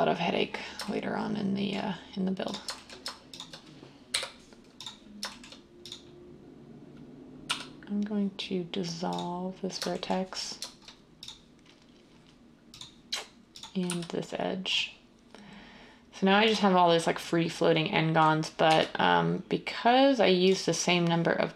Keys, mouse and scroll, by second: 4.1 m, 7.5 x, 13.8 x, 18.7 1.